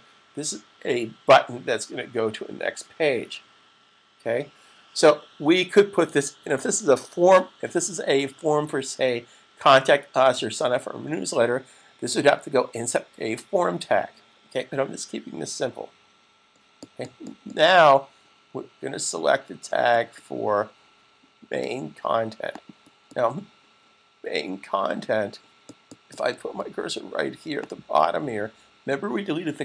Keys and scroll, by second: 2.3 super+=.